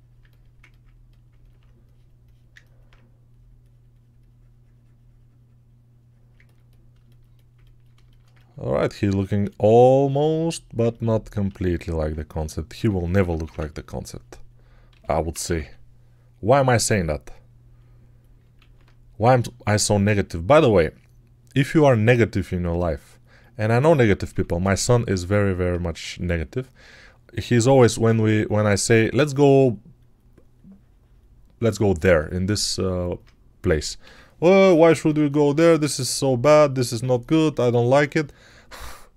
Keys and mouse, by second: 10.0-18.3 alt+shift+drag, 11.5 alt+q, 12.6 3, 13.0 ], 13.2 ], 13.4 ], 14.8 g, 15.2 ], 15.3 ], 15.5 ], 19.4 alt+q, 24.2 3, 33.9-34.9 typing.